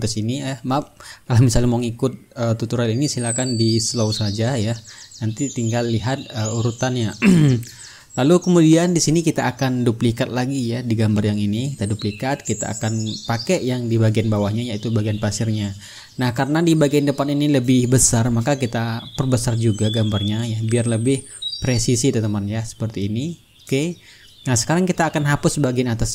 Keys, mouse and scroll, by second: 2.9-5.2 drag, 6.1-9.2 ctrl+middle drag, 9.2 click, 11.6 right click, 12.6-14.7 drag, 14.9-17.5 drag, 18.5-19.8 drag, 19.8 click, 21.7-23.6 drag, 24.7-26.1 drag.